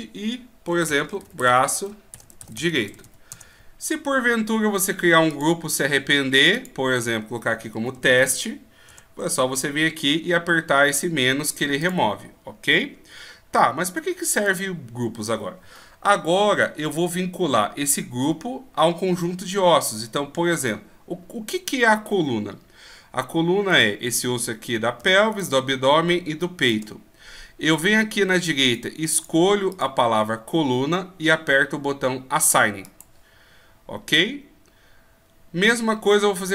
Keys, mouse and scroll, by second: 5.3 click, 11.8 click, 23.7 right click, 25.3 shift+right click, 26.6 shift+right click, 28.6 click.